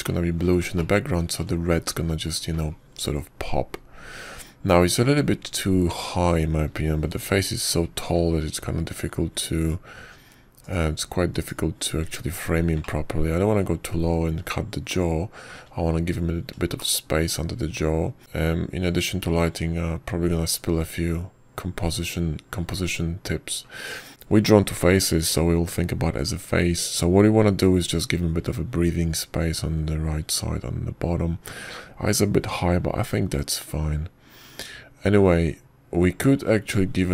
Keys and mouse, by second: 1.0 shift+click, 1.9-2.2 shift+middle drag, 2.6 ctrl+middle click, 2.9 ctrl+click, 9.9 n, 12.5 click, 13.2 click, 14.7 shift+click, 15.1-17.3 shift+middle drag, 18.2-24.1 shift+middle drag.